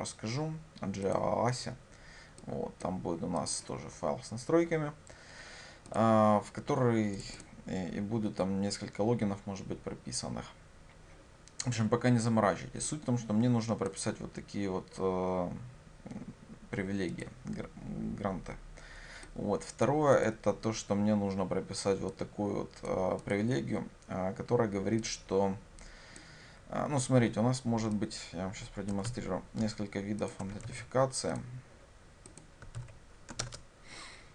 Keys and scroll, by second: 29.1 ctrl+c, 32.8 ctrl+v, 33.5 ctrl+space.